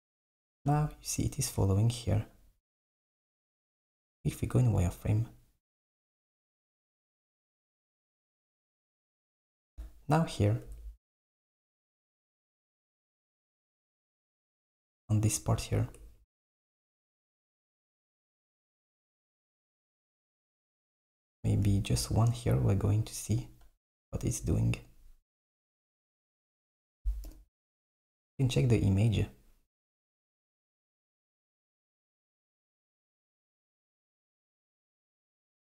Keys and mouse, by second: 3.3 z, 7.6 z, 10.4 click, 10.8 Tab, 12.2 click, 14.0 alt+z, 16.0 Tab, 20.0 r, 23.5 click, 27.3 KP_7, 29.9 click, 32.5 click, 33.7 alt+z.